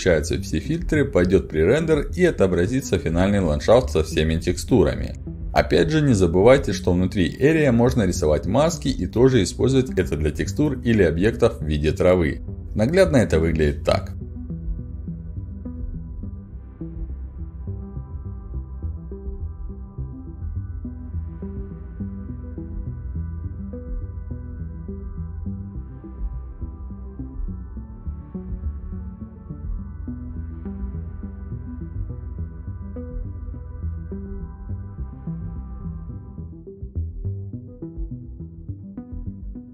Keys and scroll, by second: 4.9-7.2 typing, 8.3-12.4 typing, 20.5-24.1 typing, 31.0-34.1 typing.